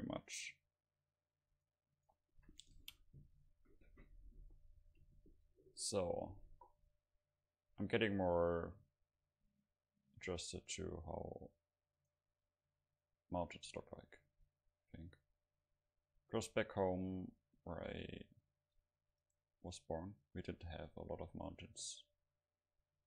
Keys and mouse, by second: 1.6-5.1 right drag, 3.6-7.1 drag, 7.8-9.7 drag, 12.0-14.7 right drag, 13.0-15.2 drag, 15.8-17.9 drag, 18.0-19.3 middle drag, 19.3-21.1 right drag, 20.3-23.0 drag.